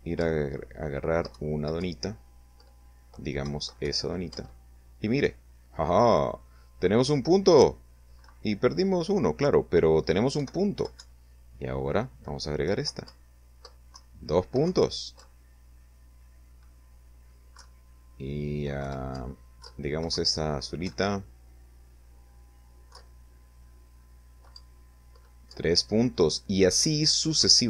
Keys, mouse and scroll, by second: 0.2 Right, 0.7 Up, 1.9 Left, 2.3 Right, 3.2 Up, 4.1 Down, 9.2 Right, 9.6 Left, 9.8 Right, 11.6 Left, 12.0 Up, 12.8 Down, 13.5 Right, 14.1 Up, 16.4 Left, 18.0 Up, 18.5 Left, 19.0 Right, 19.7 Up, 21.8 Left, 23.4 Up, 26.3 Right.